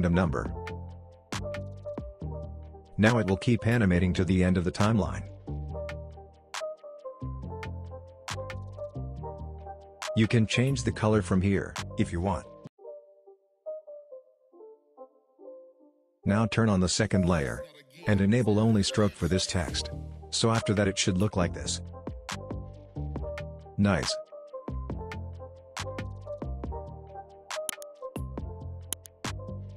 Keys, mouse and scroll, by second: 2.3 scroll up 1, 3.0 click, 3.4 space, 8.1 space, 8.5-9.5 scroll up 2, 9.5 click, 9.7 click, 13.1-13.4 click, 22.1-22.5 drag, 22.4 space, 27.3 space, 28.1 click, 29.0-29.6 scroll down 1, 29.6-29.7 scroll up 1.